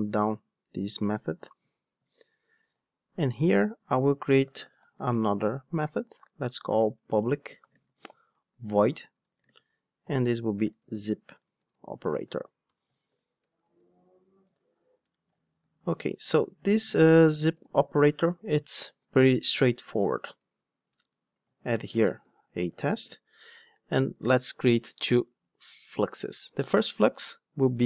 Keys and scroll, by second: 1.0 alt+shift+Up, 21.4 Tab, 23.3 Tab, 25.1 Return.